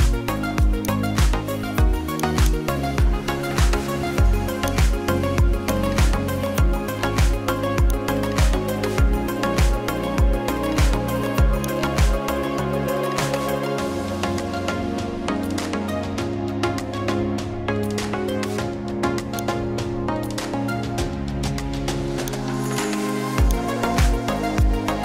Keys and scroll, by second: 19.1 space.